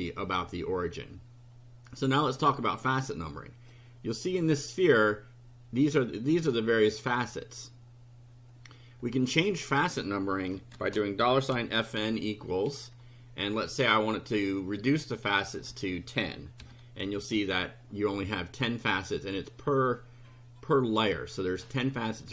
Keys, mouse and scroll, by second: 3.7 click, 9.3 click, 10.5-12.5 typing, 15.6 KP_1, 15.6 KP_0, 16.6 ;, 17.0 F5.